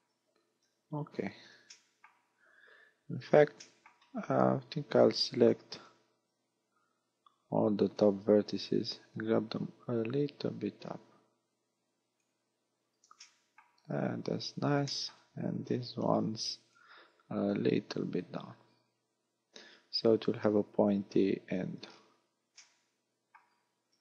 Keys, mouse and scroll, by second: 0.6 KP_1, 1.8 shift+middle click, 3.6 shift+middle click, 4.3 scroll up 1, 5.8 b, 9.2 click, 13.2 shift+middle click, 14.0-14.8 scroll up 6, 14.9 shift+middle click, 15.4 a, 16.1 b, 17.5 click, 21.5 a, 21.9-22.6 scroll down 3, 22.6 shift+middle click, 22.6 scroll down 2, 23.5-23.8 scroll down 2.